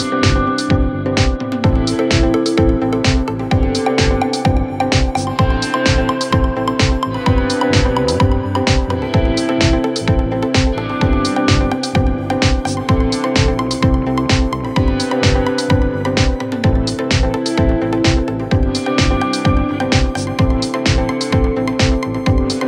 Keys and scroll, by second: 0.0-1.0 typing, 0.0 Return, 4.7 ctrl+k, 10.1 ctrl+k.